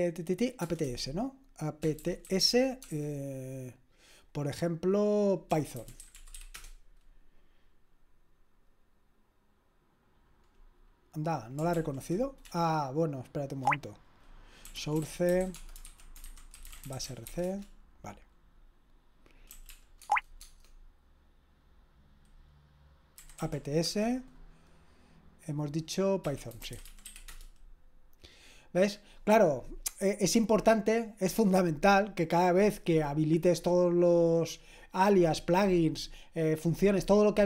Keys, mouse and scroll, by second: 0.6 Return, 0.8-2.8 typing, 5.3-6.8 typing, 11.7 ctrl+p, 12.5-17.8 typing, 19.3-20.2 typing, 20.4 Tab, 22.9-23.9 typing, 26.0-27.5 typing.